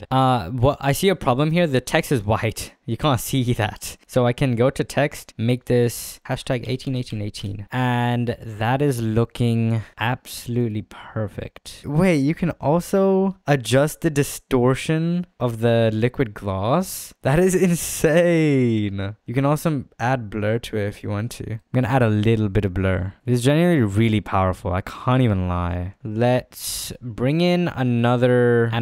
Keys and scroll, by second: 2.6 z, 6.5-7.1 typing, 7.3 Return.